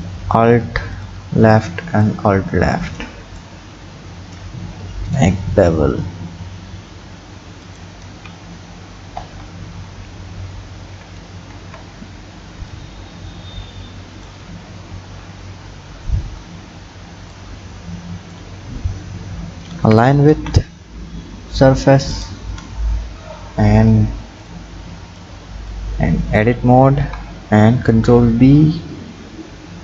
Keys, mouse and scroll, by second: 0.9 alt+shift+click, 2.0 click, 4.3 ctrl+b, 8.1 Tab, 9.2 Tab, 10.1 ctrl+z, 10.5 ctrl+z, 10.8 ctrl+z, 11.6 Tab, 12.7-15.0 drag, 15.0 KP_1, 15.8-17.3 scroll up 6, 17.3-18.8 drag, 18.8 scroll up 5, 19.9 g, 22.5-23.8 scroll down 9, 23.8 click, 24.5 click, 25.7-27.0 drag, 27.0 Tab, 27.9 ctrl+b.